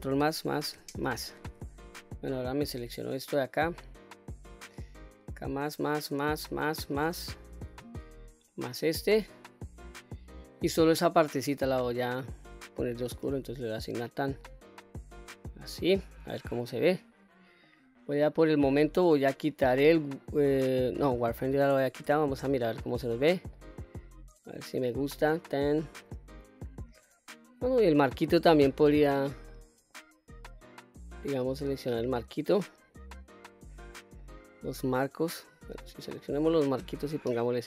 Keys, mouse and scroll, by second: 0.2 ctrl+KP_Add, 0.7 ctrl+KP_Add, 2.3-4.6 middle drag, 5.1 shift+click, 5.5 shift+click, 6.0 shift+click, 6.4 shift+click, 6.8 shift+click, 7.5 shift+click, 8.1 scroll down 1, 8.4-10.3 middle drag, 11.3 click, 13.1 click, 13.8 click, 14.3 click, 14.8-15.9 scroll down 2, 15.1 middle click, 16.2-17.6 middle drag, 18.5-21.1 drag, 22.0 Tab, 22.7-23.5 middle drag, 23.8-24.9 middle drag, 25.2-25.7 scroll up 2, 25.7-27.4 middle drag, 28.7-29.0 middle drag, 29.4-29.9 middle drag, 30.4-30.9 scroll down 1, 30.9-33.7 middle drag, 34.2-35.0 middle drag, 36.9 Tab, 37.4-37.6 middle drag.